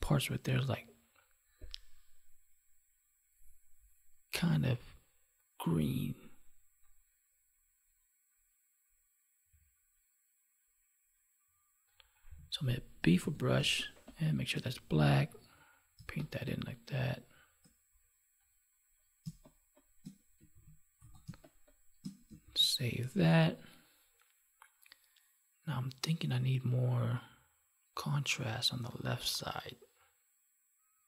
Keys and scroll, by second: 13.6 space, 15.9 space, 19.2 space, 21.2 space, 22.4 ctrl+s.